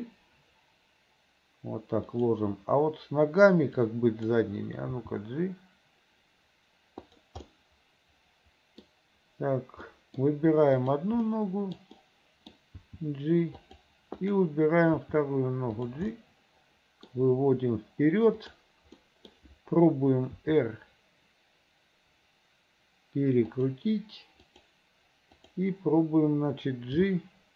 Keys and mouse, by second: 4.1 click, 5.0 g, 7.7-8.9 middle drag, 10.0 middle click, 11.0 click, 11.4 middle click, 12.1 middle click, 13.1 g, 14.3 click, 15.1 g, 16.3 click, 18.6 click, 19.1 middle click, 20.4 r, 24.5 click, 25.4 click, 27.1 g.